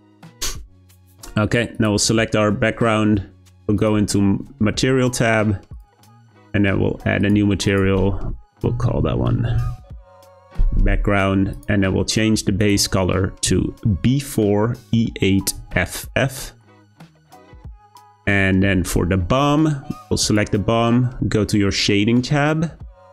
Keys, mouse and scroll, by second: 1.7 click, 3.8 click, 7.2-10.7 drag, 11.5 click, 20.2 click.